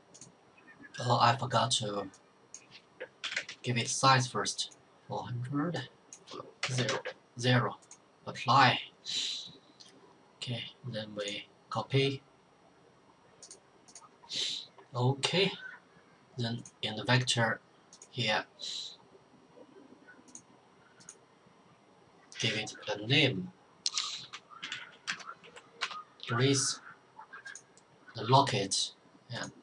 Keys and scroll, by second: 2.9-3.8 typing, 6.3-7.3 typing, 23.8-25.3 typing, 25.7 Return.